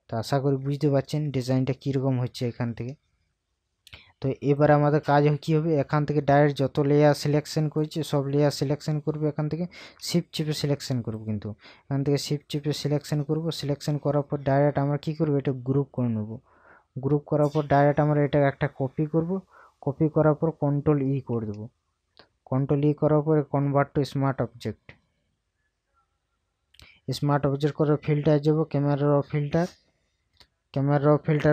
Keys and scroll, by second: 1.3 ctrl+KP_Subtract, 21.4 ctrl+e.